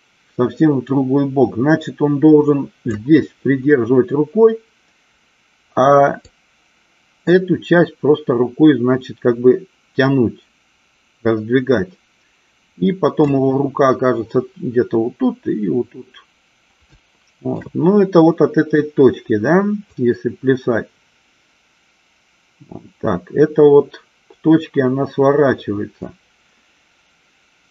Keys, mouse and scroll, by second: 6.5-13.3 drag, 17.1 shift+middle click, 20.0-27.7 drag.